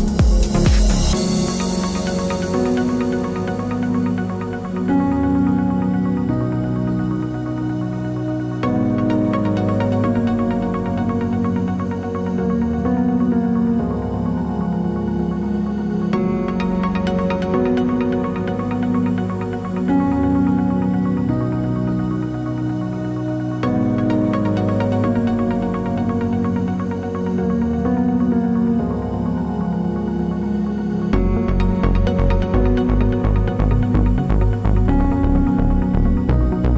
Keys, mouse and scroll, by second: 3.2-6.6 drag, 5.8 1, 6.0 s, 6.6-20.0 middle drag, 15.9-17.7 scroll up 2, 17.7-18.3 scroll up 1, 18.3 click, 18.4-18.9 scroll down 2, 20.0 click, 20.2 s, 20.6-22.1 middle drag, 21.2-21.9 scroll up 2, 21.9 scroll down 2, 22.1 3, 22.3 click, 22.9 x, 23.0 middle click, 23.6 2, 23.8 1, 24.1 middle click, 24.4 ctrl+r, 26.1 click, 26.3 KP_7, 26.6 shift+middle click, 27.6 click, 28.1 middle click, 31.7 middle click, 32.2 ctrl+r, 35.0 click, 35.6 ctrl+r, 36.0 Escape, 36.1 ctrl+z.